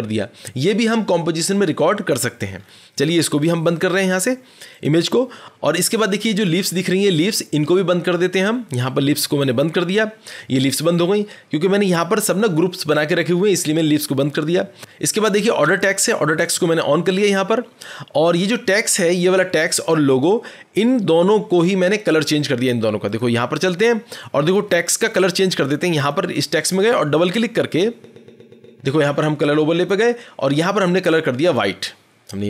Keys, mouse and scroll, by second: 2.5-4.5 scroll, 4.7-5.4 drag, 4.7-5.1 scroll, 9.5-14.6 drag, 16.4-20.0 drag, 23.1 click, 24.6-25.2 scroll, 25.2-26.0 scroll down 5, 26.0 click, 27.1 click, 27.2 click, 27.2-27.8 scroll, 29.8 click, 31.1 click.